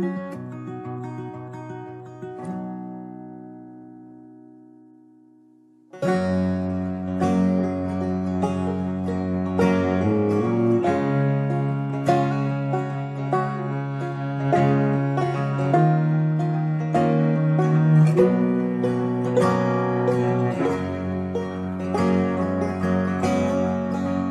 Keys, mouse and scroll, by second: 0.1 g, 0.7 shift+a, 2.5 shift+a, 3.1 shift+a, 16.2 h, 16.3 g, 16.8 h, 17.2 h, 19.0 shift+a, 21.6 x, 21.7 shift+a.